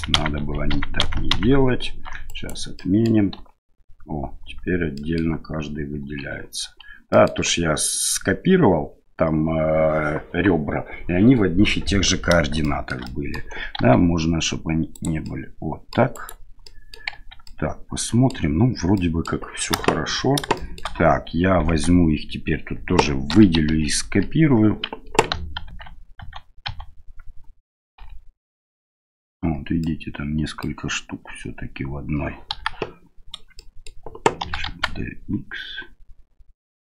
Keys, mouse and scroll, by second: 0.1 ctrl+z, 0.4 ctrl+z, 0.7 ctrl+z, 1.0 ctrl+z, 1.3 ctrl+z, 2.2 right click, 2.7 middle click, 3.3 l, 4.4 l, 5.0 middle click, 6.0 l, 6.6 l, 7.2 middle click, 12.6 shift+right click, 13.1 middle click, 13.8 s, 15.3 middle click, 16.1 right click, 16.6 middle click, 17.1 Tab, 17.4-18.3 middle drag, 18.9 middle click, 19.7 KP_1, 20.5 shift+middle click, 21.7 Tab, 23.3 l, 23.7 l, 24.0 l, 25.6 alt+a, 26.2 a, 26.6 a, 28.0 l, 28.4 l, 29.4 l, 29.8 middle click, 31.3 l, 32.5 KP_1, 33.6 shift+middle click, 34.4 shift+d.